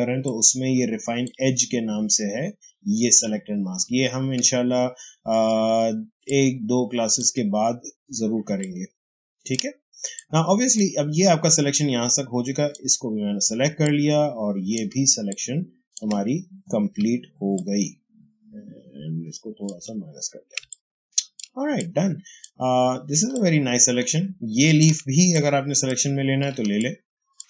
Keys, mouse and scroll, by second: 3.6 ctrl+space, 6.2-8.4 shift+drag, 8.4 ctrl+space, 8.5 ctrl+click, 8.9 ctrl+space, 10.0 space, 10.0 click, 10.2 space, 11.6-13.6 drag, 13.6 space, 13.7 click, 14.0 space, 15.2-17.4 ctrl+drag, 17.4-20.5 alt+drag, 20.5 space, 20.6 ctrl+click, 21.7-23.2 drag, 23.2-26.4 ctrl+drag, 26.4 ctrl+space, 26.7-27.4 ctrl+drag.